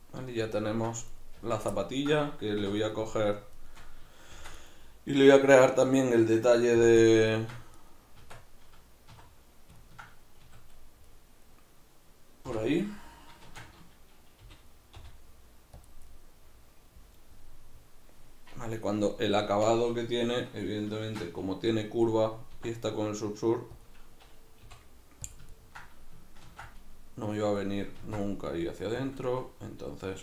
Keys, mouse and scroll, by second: 1.2 right click, 1.4 Tab, 1.8-2.8 ctrl+middle drag, 2.6 3, 2.8 right click, 3.2 shift+right click, 3.4 shift+right click, 3.6 shift+right click, 4.4 shift+d, 4.7 right click, 6.8 p, 7.4 Tab, 7.8 right click, 8.2 Tab, 9.2 1, 9.8-15.9 ctrl+middle drag, 10.5 a, 12.5 o, 13.5 shift+Tab, 14.4 g, 15.9 click, 16.1-24.7 middle drag, 21.0 shift+Tab, 22.6 e, 23.9 click, 24.7 i, 25.4-27.6 ctrl+middle drag, 25.4 click, 26.4 ctrl+r, 27.6 click, 28.0 ctrl+r, 29.1 click, 29.2-30.2 middle drag.